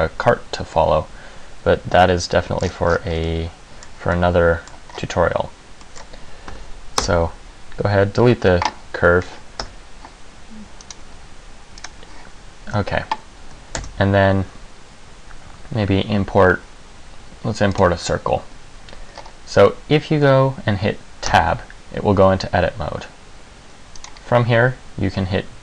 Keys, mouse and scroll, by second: 2.2 middle click, 2.8-3.4 scroll down 9, 3.4 middle click, 4.4 middle click, 5.0 scroll up 4, 6.0 middle click, 6.7 Delete, 9.8 Tab, 11.0 right click, 13.9 shift+a, 19.3-20.2 scroll up 2, 20.2-21.1 scroll up 1, 21.4 Tab, 24.1 right click.